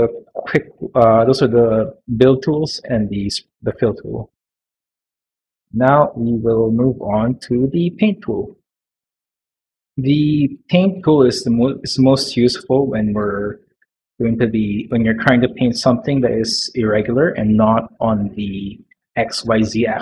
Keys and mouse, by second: 0.5 Tab, 3.7 middle click, 4.7 middle click, 5.6 middle click, 6.1 shift+middle click, 6.8 Tab, 11.7 middle click, 12.4 shift+middle click, 14.6 middle click, 15.4 middle click, 15.8 middle click, 18.2 middle click, 18.7 middle click.